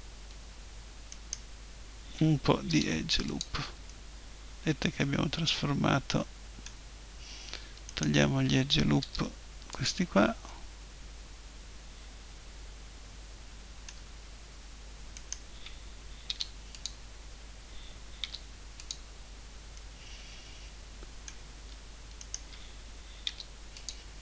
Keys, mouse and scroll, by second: 1.1-2.7 right drag, 2.7 Delete, 3.9-5.6 middle drag, 5.7 middle click, 7.9-9.0 right drag, 9.0 Delete, 10.5-11.8 middle drag, 12.6-15.2 middle drag, 15.2-17.0 right drag, 16.3 Delete, 18.2 Delete, 21.6 middle click, 22.2-24.1 right drag, 23.2 Delete, 24.1 middle click.